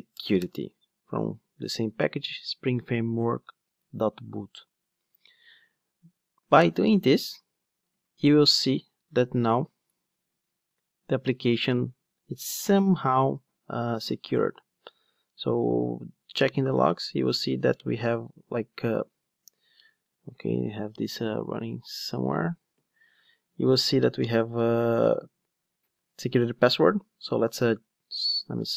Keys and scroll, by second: 9.3 ctrl+d, 27.6 ctrl+d.